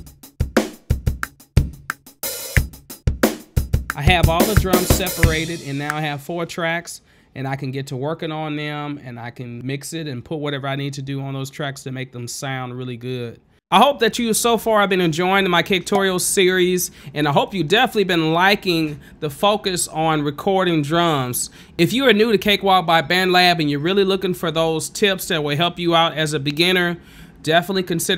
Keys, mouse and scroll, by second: 6.6 space.